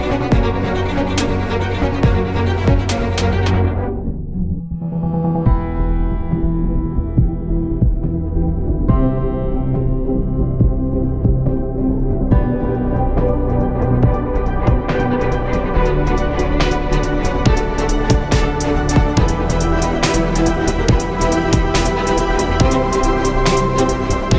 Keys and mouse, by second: 1.0 KP_1, 1.9 ctrl+b, 10.3 Tab.